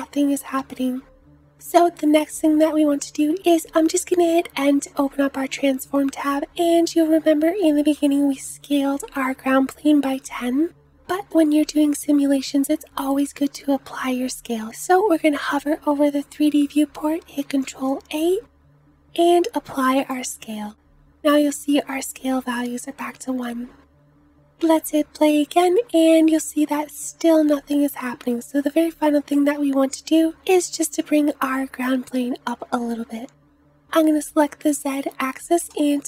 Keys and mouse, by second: 2.6 n, 17.5 ctrl+a, 24.5 space, 26.4 space.